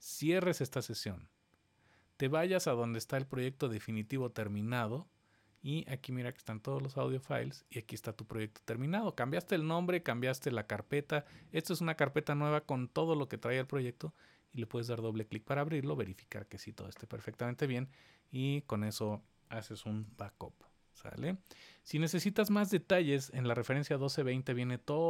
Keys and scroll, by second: 20.0 shift+super+w.